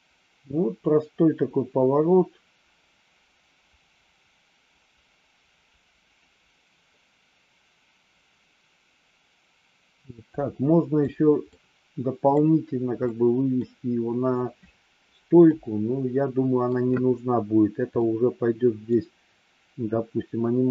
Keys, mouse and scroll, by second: 11.4 middle click, 12.9 middle click, 15.4-16.7 middle drag, 18.1 middle click.